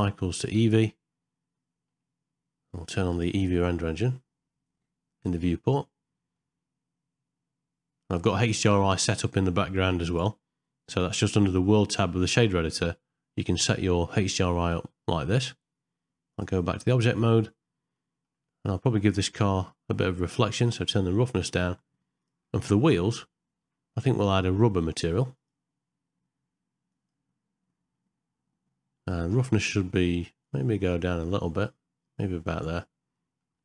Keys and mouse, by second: 1.7 middle click, 6.3-8.0 middle drag, 8.3 shift+middle click, 10.1-11.1 drag, 12.4 middle click, 15.4 middle click, 16.4 click, 17.9 shift+middle click, 20.9 click, 24.3 click, 25.3 click, 30.5-32.6 drag, 33.1 ctrl+middle click.